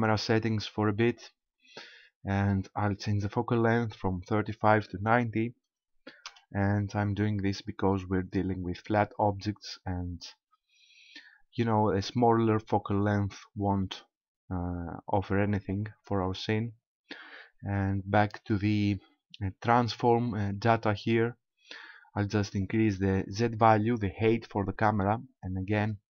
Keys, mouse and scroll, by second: 1.0 click, 4.4 click, 18.4 click, 22.6 click.